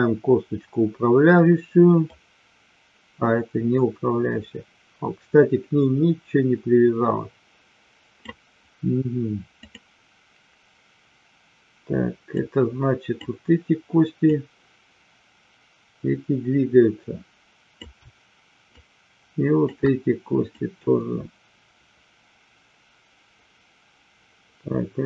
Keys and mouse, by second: 2.0-8.3 drag, 9.5 click, 12.4-13.4 drag, 14.4-17.9 drag, 18.7-19.9 shift+drag, 20.6-25.0 drag.